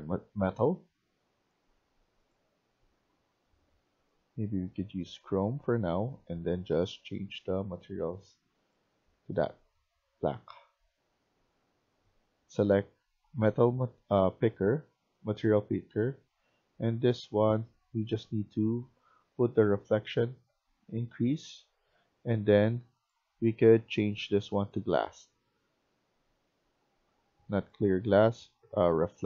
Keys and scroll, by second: 14.9 a, 15.2 w.